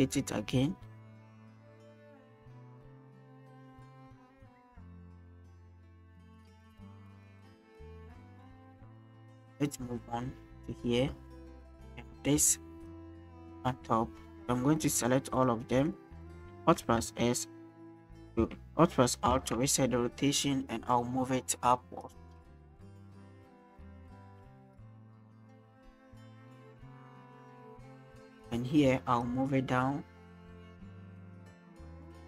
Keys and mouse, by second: 5.4-7.6 drag, 9.3-12.9 drag, 13.3-13.6 shift+middle drag, 14.8 shift+click, 15.4 shift+click, 15.8 shift+click, 16.3 shift+click, 17.1 alt+s, 18.4 alt+s, 19.3 alt+r, 23.2-25.7 middle drag, 26.1 shift+middle click, 26.7-28.0 drag, 28.2 shift+middle click, 29.2 click, 32.1 shift+middle click.